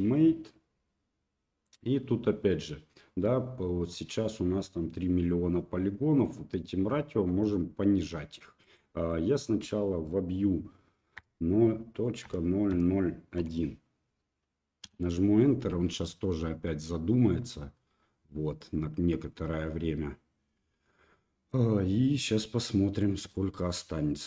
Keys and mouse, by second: 1.7-24.2 drag.